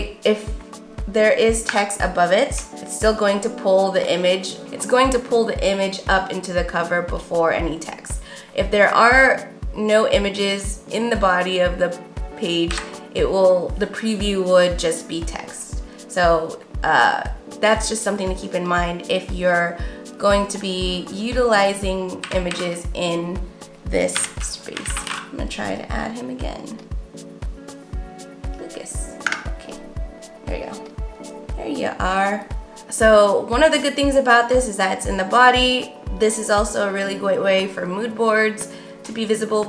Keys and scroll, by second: 1.5 Return, 2.8-4.3 typing, 12.6 BackSpace, 22.1-25.6 typing, 29.5 Return.